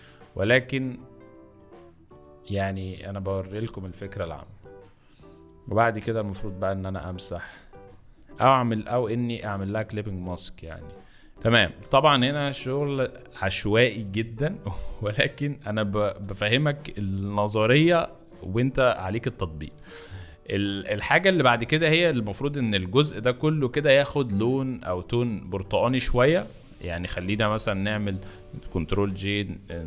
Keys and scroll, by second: 3.5 z, 7.8 ], 11.3 z, 11.9 space, 14.7 space, 16.1 b, 16.9 [, 20.3 ctrl+z, 26.1 ctrl+z, 26.7 ctrl+z, 28.7 ctrl+j.